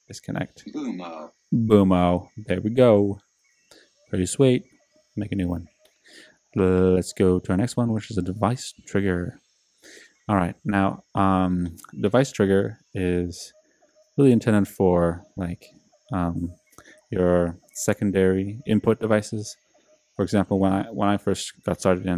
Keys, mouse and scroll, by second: 7.2-8.5 drag.